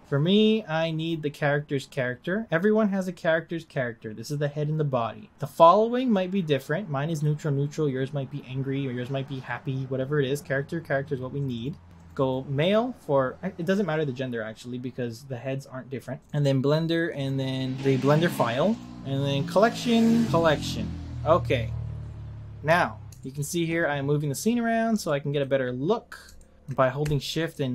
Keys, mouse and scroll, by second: 21.6-22.6 scroll up 9, 22.6-24.5 middle drag, 24.5-25.0 scroll up 1, 25.0-27.7 shift+middle drag.